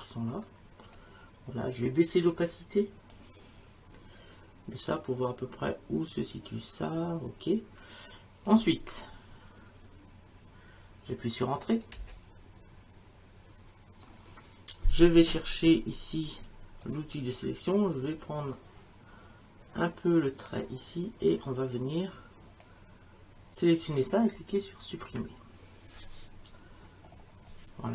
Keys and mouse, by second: 3.1 click, 11.9 Return, 16.8 click, 20.5 click, 25.1 Delete.